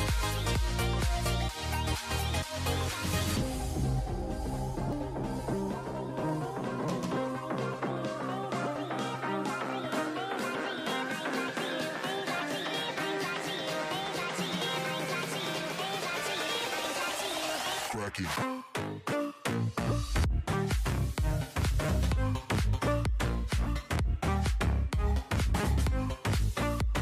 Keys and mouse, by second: 0.2 a, 0.2 a, 1.2 k, 4.0 a, 4.0 a, 4.4 k, 6.2 a, 6.4 a, 8.0-8.8 ctrl+z, 8.8 a, 9.0 ctrl+r, 9.8 s, 11.2 a, 11.6 k, 13.7-14.1 drag, 13.7 a, 14.1 k, 15.7-16.1 drag, 15.7 a, 16.8 a, 17.0 right click, 18.2 KP_7, 18.4 z, 18.6 z, 19.8 z, 21.3 KP_7, 21.8 g, 23.7 KP_7, 24.1 g, 25.8 click, 26.2 right drag, 26.5 KP_7, 26.8 g.